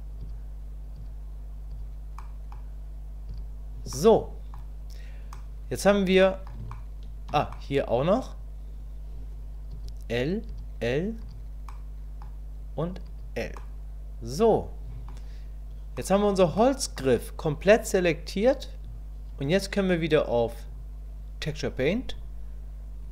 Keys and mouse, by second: 1.0 l, 2.3 middle click, 3.3 l, 4.1 middle click, 5.4 middle click, 6.3 middle click, 6.7 shift+middle click, 7.6 middle click, 10.5 l, 11.8 middle click, 13.1 l, 13.6-15.1 middle drag, 16.0 click, 16.6 shift+click, 20.7-22.2 drag.